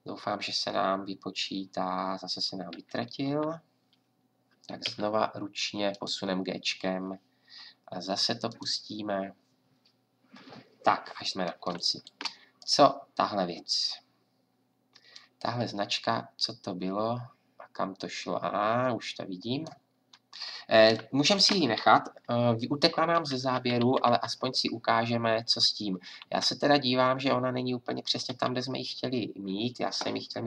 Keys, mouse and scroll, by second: 2.7 Left, 3.3 Right, 4.8 g, 18.1 middle click, 23.1 Left, 28.3 Right.